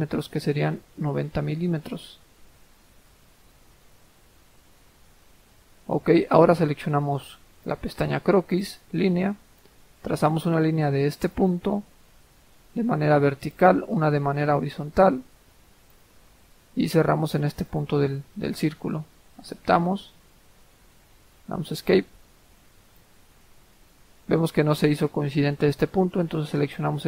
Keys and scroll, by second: 0.7-1.6 typing, 1.8 Return, 12.6-13.4 typing, 19.4 Return, 20.4 Escape, 21.1 Escape.